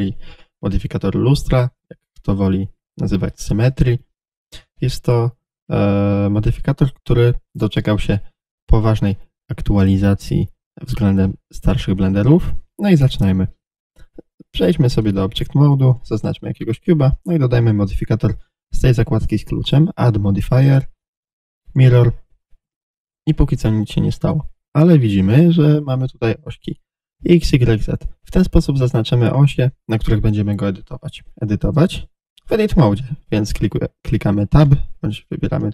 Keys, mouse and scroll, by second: 7.8 click, 8.9-13.0 drag, 15.0-16.2 middle drag, 16.2 click, 16.3-20.0 middle drag, 20.0-24.9 drag, 24.9-27.6 middle drag, 27.6 click, 28.7 click, 29.2 click, 30.1 click, 34.6 Tab, 35.4 click.